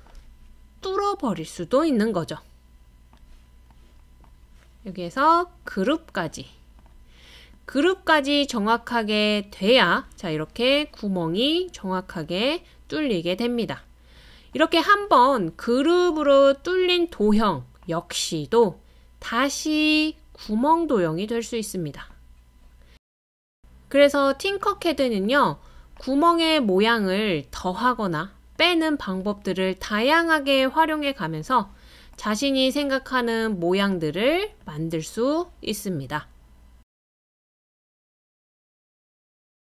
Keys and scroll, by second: 26.6 super+c, 26.8 super+v.